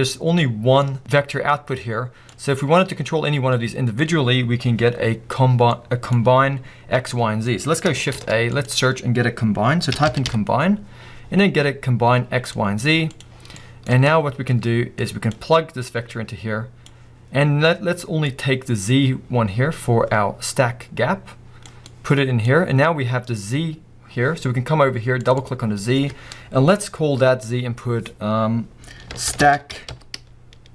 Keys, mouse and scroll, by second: 2.3 click, 21.9 click.